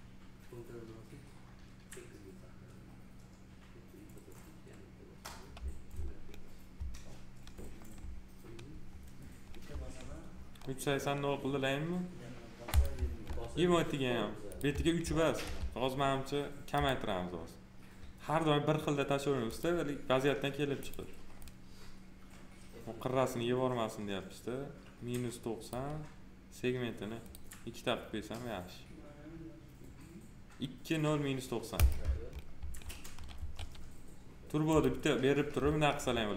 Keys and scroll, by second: 15.4 alt+r, 33.3 2.